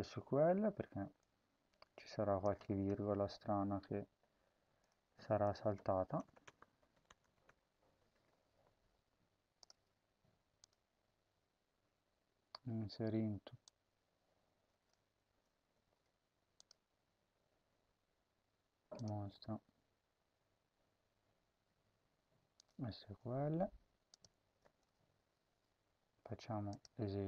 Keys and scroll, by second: 2.5 ctrl+c, 5.0 ctrl+v, 6.2-7.8 typing, 15.0 ctrl+c.